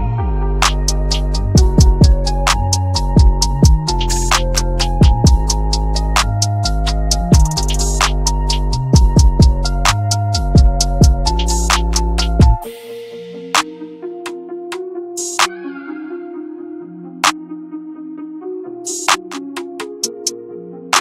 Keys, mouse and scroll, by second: 4.5-9.0 drag, 9.0-9.4 scroll down 1, 9.4-9.8 scroll up 1, 9.8 w, 10.1 click, 10.5-11.1 scroll down 1, 11.1 click, 11.8-12.6 scroll up 1, 12.6 F12, 13.4 click, 15.8-16.7 scroll down 1, 16.8 ctrl+click, 17.3 ctrl+right click, 17.8-19.0 drag, 19.9-20.2 scroll up 1, 20.2 scroll down 1.